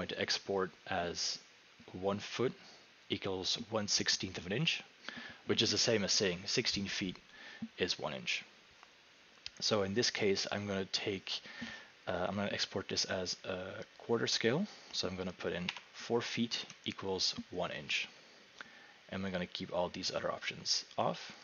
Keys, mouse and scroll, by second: 0.6 typing, 10.4 click, 15.7 4, 16.6 Tab.